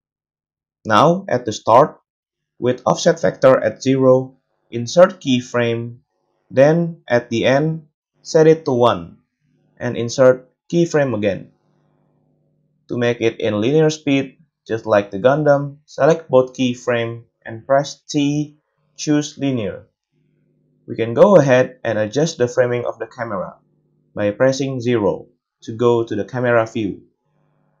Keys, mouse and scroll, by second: 0.0-17.2 drag, 5.0 i, 11.4 i, 12.0 space, 14.5 a, 14.7 a, 15.2 middle click, 15.2 right click, 16.3 a, 17.8 t, 18.9-27.8 drag, 24.8 KP_0.